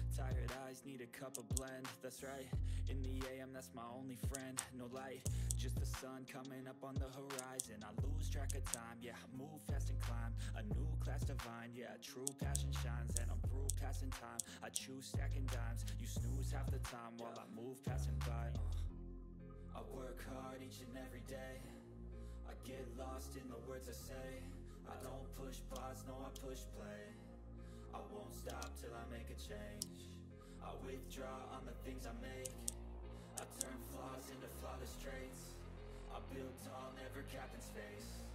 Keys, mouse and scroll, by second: 0.8 click, 1.0-2.0 typing, 1.8 click, 2.8 click, 2.8 click, 4.0-5.9 typing, 4.9 click, 5.6 click, 7.0-9.2 typing, 8.0 click, 8.9 click, 10.2 click, 12.2-14.7 typing, 12.4 click, 12.7 click, 13.4 click, 13.8 click, 14.6 click, 14.9 click, 15.7 ctrl+scroll up 1, 16.0 ctrl+scroll down 1, 18.2-21.9 drag, 21.9 right click, 23.0 click, 24.8 click, 25.7 ctrl+scroll down 1, 26.0 ctrl+middle click, 26.4 click, 28.6 ctrl+z, 28.7-31.7 drag, 32.1-34.0 typing, 33.0 click, 33.8 click, 35.6 click, 37.1 click.